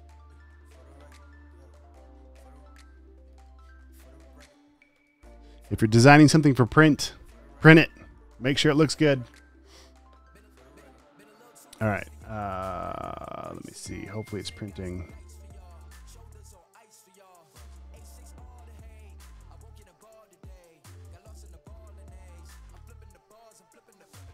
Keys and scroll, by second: 18.8-23.3 typing.